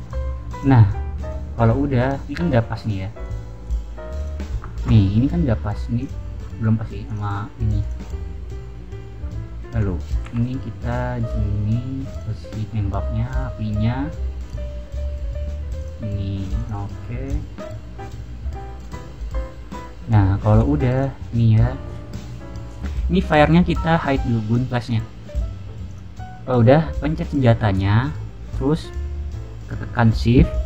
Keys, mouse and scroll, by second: 0.5 click, 0.7-1.1 scroll down 1, 1.4-2.7 middle drag, 3.1 click, 3.6 click, 4.1 click, 4.9-5.7 middle drag, 5.9 click, 7.0 click, 7.7 click, 9.7 scroll down 1, 10.2 g, 12.0 click, 12.9-13.7 middle drag, 13.8-14.3 middle drag, 14.4 click, 14.6-14.9 middle drag, 15.7 middle click, 15.7 click, 16.5 click, 17.2 click, 17.4-18.7 middle drag, 19.0-19.8 middle drag, 20.5 click, 20.9 click, 23.2 click, 24.7 click, 25.3 middle click, 25.8 click.